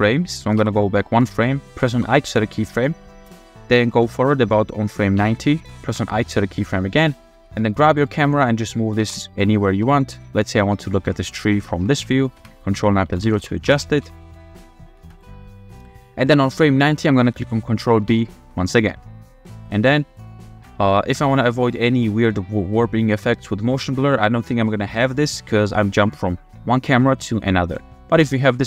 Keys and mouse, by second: 0.6 Left, 2.0 i, 5.3 Right, 5.9 i, 6.5-7.1 middle drag, 7.3-10.6 typing, 9.6 shift+middle drag, 11.1-11.5 drag, 12.4 ctrl+KP_0, 13.1-14.6 typing, 15.1 click, 18.2 ctrl+b, 18.9-21.8 drag, 23.5 click, 25.2 click, 27.5 click.